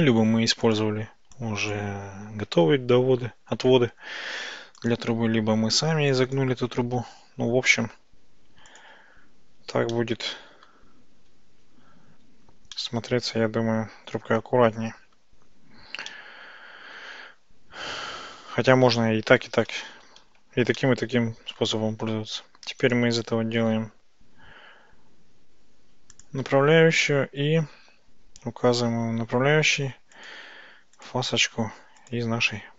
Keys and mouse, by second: 0.7 click, 1.5 click, 2.4 ctrl+shift+b, 4.8 click, 6.1 click, 6.9 ctrl+shift+b, 8.7 click, 10.0 shift+middle click, 11.1 Tab, 12.8-15.3 middle drag, 16.1-19.5 middle drag, 20.9-21.7 shift+middle drag, 23.0-26.3 drag, 30.2 click, 31.1-32.2 drag.